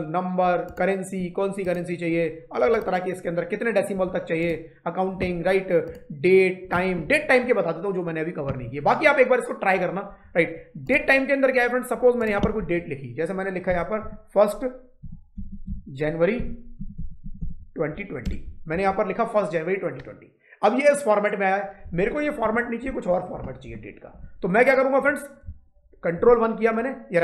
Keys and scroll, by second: 13.5-17.7 typing, 18.1 Return, 18.6 Up, 26.0 ctrl+1.